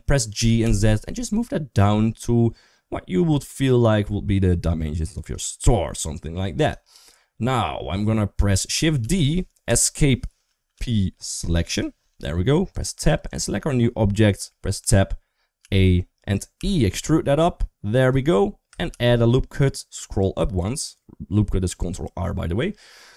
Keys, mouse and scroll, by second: 0.2 g, 6.6 shift+middle click, 8.8 shift+d, 10.6 p, 12.6 Tab, 13.1 click, 14.6 Tab, 15.4 a, 16.4 e, 18.7 ctrl+r.